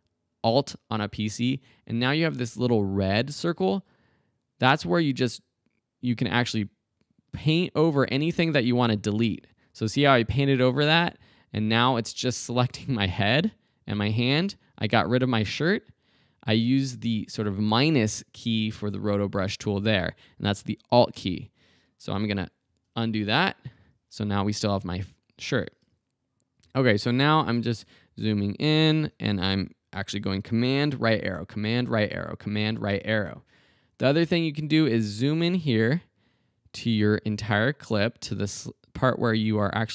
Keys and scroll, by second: 22.7 super+z, 26.6 super+Right, 28.1 super+Right, 31.0 super+Right.